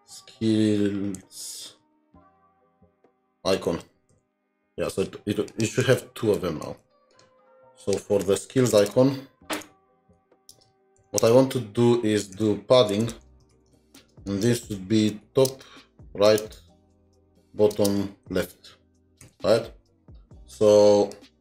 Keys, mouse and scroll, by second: 0.0-3.6 typing, 5.5 shift+click, 6.2-6.9 typing, 7.8 double click, 8.7 Return, 8.9 Return, 9.6-11.1 typing, 11.2 Return, 12.7-14.3 typing, 16.2-16.7 typing, 18.5 typing, 19.9 typing.